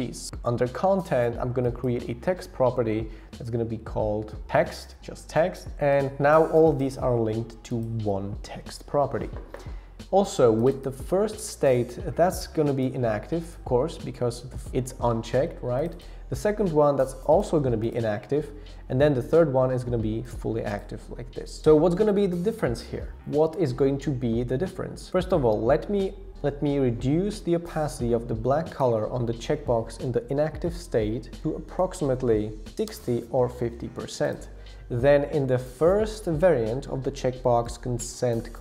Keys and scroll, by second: 31.1 shift+Down, 31.4 shift+Down, 31.8 shift+Down, 32.6 shift+Up.